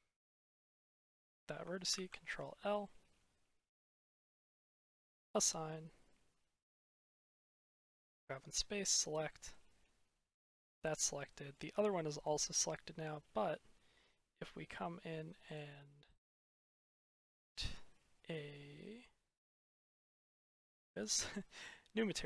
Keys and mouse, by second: 0.5 click, 1.8 ctrl+l, 6.5 middle click, 7.3 middle click, 8.4 click, 9.1 middle click, 10.3 middle click, 11.1 middle click, 12.4 middle click, 15.3 click, 20.5 click, 22.0-22.2 drag.